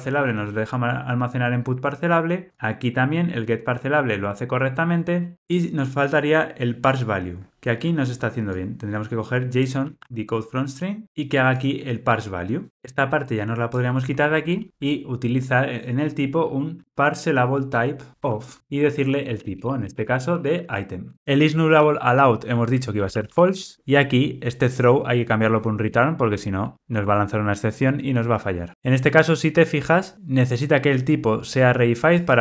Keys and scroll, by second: 9.8 super+c, 18.4 Return, 27.2 Return.